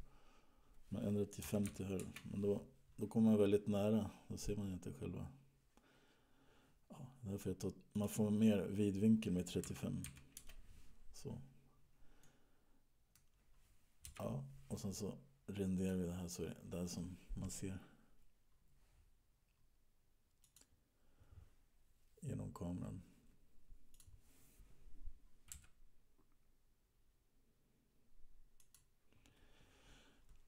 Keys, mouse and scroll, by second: 4.3-5.4 scroll down 2, 5.4-6.2 scroll up 2, 6.2-7.3 scroll up 1, 8.1 click, 12.5 middle click, 14.3 KP_0, 16.0 click, 20.6 click, 24.1 click, 26.1 g.